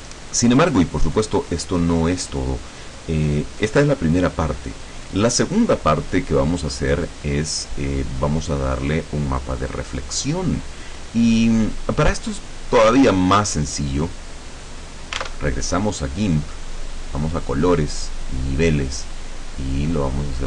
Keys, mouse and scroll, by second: 1.6 right click, 8.8-12.3 drag, 13.0-13.6 drag, 14.2-15.0 drag, 15.3 alt+Tab, 17.4-18.6 drag.